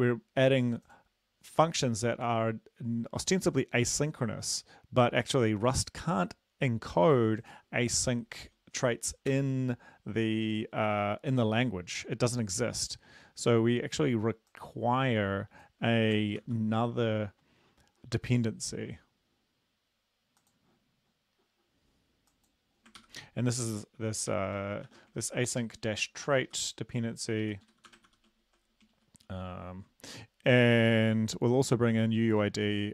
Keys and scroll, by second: 9.3 Return, 16.4 ctrl+c, 23.0 ctrl+v, 24.9 shift+Home, 25.2 ctrl+x, 25.6 Up, 26.1 Up, 26.5 Up, 27.5 Up, 27.7 shift+End, 27.9 Return, 28.1 ctrl+v, 28.9 alt+Down, 29.3 alt+Down.